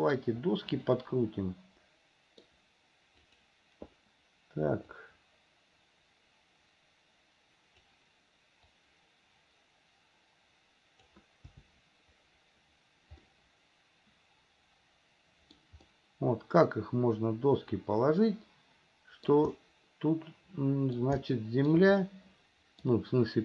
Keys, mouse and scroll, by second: 1.0-2.6 middle drag, 3.4 click, 5.1-8.1 drag, 9.0-11.3 drag, 13.4-15.8 middle drag, 16.1-19.5 middle drag, 19.7-21.2 middle drag, 21.5 shift+middle click, 22.2 middle click.